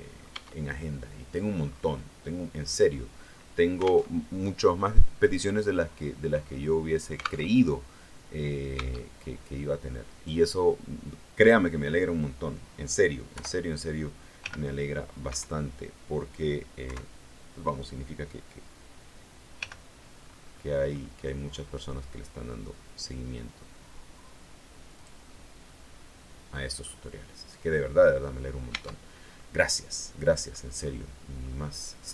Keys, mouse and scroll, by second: 0.2 Tab, 0.3 scroll down 1, 0.6 click, 0.6 middle click, 0.7 click, 1.5-1.8 scroll up 1, 2.6-3.2 scroll down 1, 3.2 scroll up 1, 4.0 alt+Tab, 7.4 alt+Tab, 8.7 Tab, 10.0 right click, 13.2 o, 14.3 g, 15.2 Escape, 16.8 KP_3, 19.5 g, 20.2-23.6 scroll up 2, 24.9 click, 25.6-26.9 middle drag, 27.8-28.2 scroll down 2, 28.6 Tab, 29.3-30.6 middle drag, 30.7 scroll up 1, 31.4-32.0 scroll down 1, 32.0 middle click.